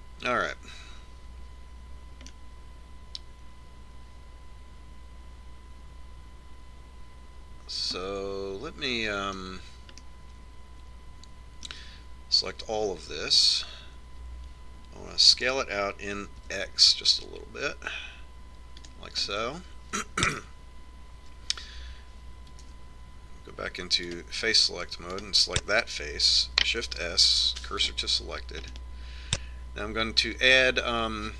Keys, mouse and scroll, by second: 1.1 Tab, 3.6 middle click, 3.8 middle click, 4.5 middle click, 11.3-13.1 middle drag, 14.3 a, 14.8 a, 16.7 s, 20.6-22.5 middle drag, 24.1 ctrl+Tab, 26.6-28.2 right drag, 28.2 shift+s, 30.3 middle click, 30.5 middle click.